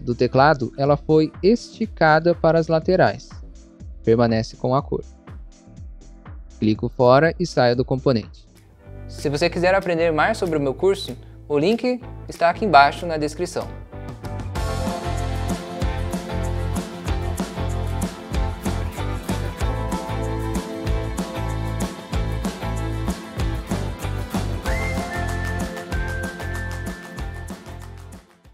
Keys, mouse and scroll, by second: 4.4 scroll down 1, 5.1 middle click, 5.3 middle click, 5.5 scroll down 1, 6.1 middle click, 6.3 middle click, 6.7 click, 7.5 scroll down 1, 8.1 scroll down 1.